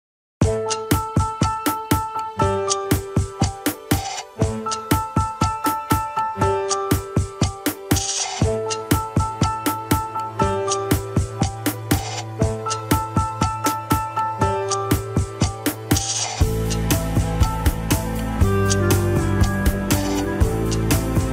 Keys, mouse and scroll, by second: 1.6 ctrl+z, 2.9 f, 3.8 click, 4.5 scroll down 3, 4.6 middle click, 5.1-6.1 drag, 6.1-7.1 middle drag, 7.1-7.6 scroll up 2, 7.6-11.1 drag, 11.1-11.5 scroll down 1, 11.5-12.5 drag, 12.5 middle click, 13.1 click, 13.7 middle click, 14.3 click, 14.7 scroll up 3, 15.1 middle click, 16.1 scroll down 2, 16.5-17.5 middle drag, 17.5-18.1 scroll up 3, 18.1 shift+middle click, 18.3 scroll up 1, 18.9-21.3 drag.